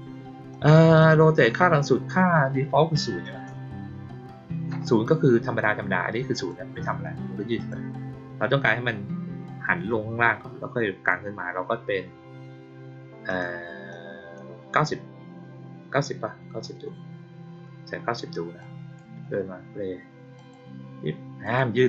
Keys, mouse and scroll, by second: 0.4 click, 0.9 click, 6.3 click, 7.5 click, 13.2 click, 13.8 click, 18.5-18.9 drag, 20.3 click, 21.4 click.